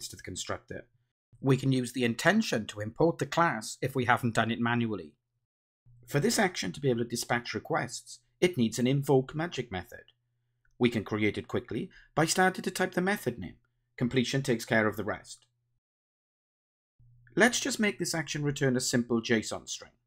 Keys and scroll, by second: 2.1 alt+Return, 6.3 Return, 13.8 Return, 15.5 Return, 16.7 Return, 18.9 Return.